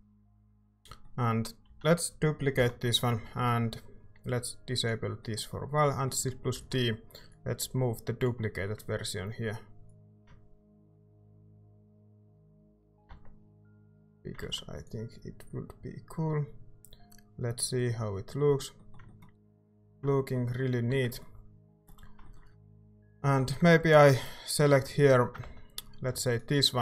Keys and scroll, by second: 0.7 Tab, 1.6 a, 2.5 l, 6.5 d, 13.1 Tab, 14.1 a, 14.4 ctrl+s, 20.9 Tab, 23.3 a, 25.4 z.